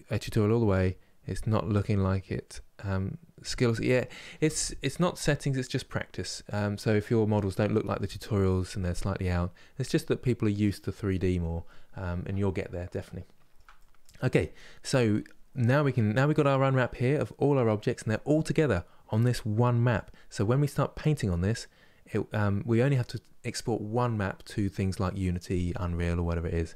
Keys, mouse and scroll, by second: 7.0-26.7 middle drag.